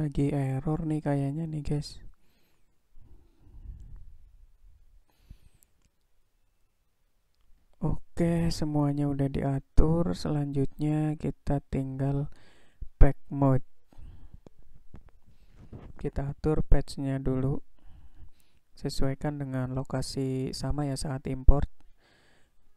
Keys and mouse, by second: 0.0-3.3 drag, 8.4-9.4 middle drag, 21.6-22.7 drag.